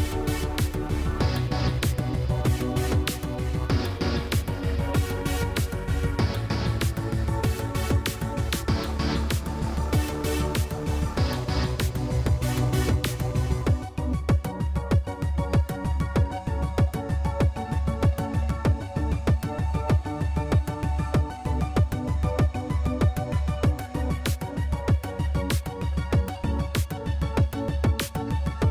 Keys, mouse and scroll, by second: 0.0 click, 2.3-3.5 drag, 3.5-5.2 middle drag, 5.2 click, 6.9-7.6 drag, 8.0 click, 9.4-10.2 drag, 11.1 Tab, 11.7 click, 12.2 Tab, 12.4 Tab, 12.5 middle click, 12.6 Tab, 13.9 middle click, 15.3 drag, 15.4 middle click, 15.6-16.4 drag, 16.7-20.7 drag, 21.0-21.7 drag, 21.9-23.3 drag, 23.9-24.6 drag, 25.1 click, 26.9-27.7 drag, 28.0 click.